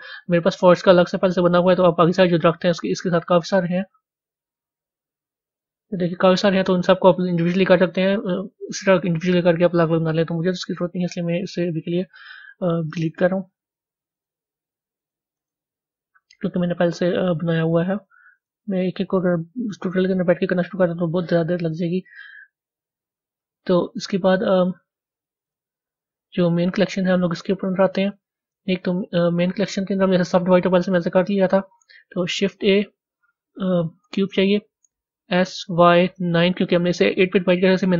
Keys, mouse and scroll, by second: 3.6 click, 5.7 scroll down 4, 7.3-11.7 middle drag, 11.7 click, 14.6 click, 17.9 click, 25.3 click, 26.6 click, 27.1 click, 27.9-29.2 middle drag, 29.2 KP_1, 29.6 middle click, 30.2 b, 30.9 Tab, 34.2-34.7 scroll down 2, 35.1 s, 36.9 click, 37.6 click.